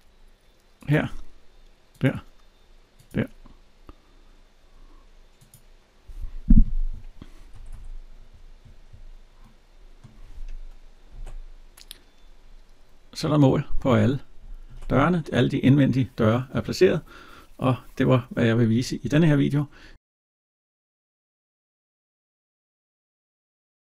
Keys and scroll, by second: 7.3 Escape, 10.9 alt+Tab.